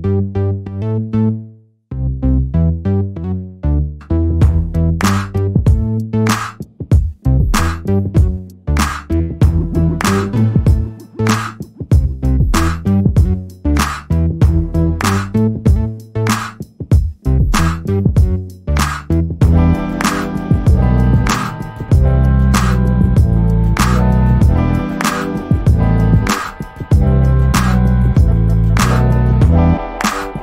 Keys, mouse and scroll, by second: 0.3 alt+middle click, 0.6 alt+click, 2.7 click, 4.1 alt+middle click, 4.4 alt+click, 7.9 double click, 8.4 click, 9.7 double click, 10.3 click, 11.9 alt+middle click, 12.2 alt+click, 13.8 alt+middle click, 14.1 alt+click, 15.6 double click, 18.1 click, 18.4 right click, 18.9 click, 23.1 alt+double click, 23.3 click, 23.8 double click, 25.4 click, 26.0 BackSpace, 26.7 click, 27.1 double click.